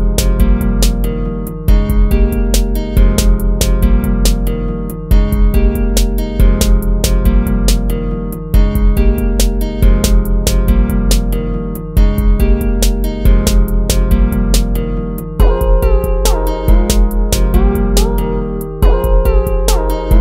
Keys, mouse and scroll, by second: 1.5 ctrl+z, 3.5 ctrl+z, 14.7 ctrl+-, 15.1 ctrl++, 16.1 ctrl+-, 17.5 ctrl+-, 17.9 ctrl++, 18.3 ctrl+z.